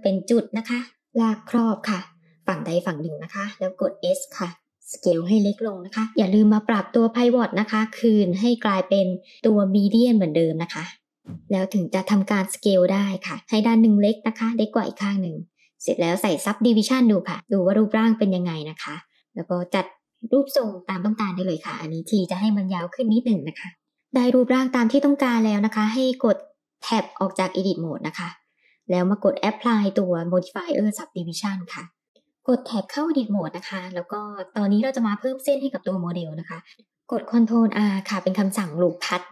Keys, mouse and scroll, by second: 2.0 click, 3.6 s, 9.3-10.7 drag, 11.3 s, 14.2-16.2 drag, 18.7 g, 23.8-25.0 middle drag, 27.0-27.6 drag, 27.9 Tab, 30.3-31.1 drag, 31.9 Tab, 32.0 middle click, 36.7 ctrl+r, 36.7 middle click.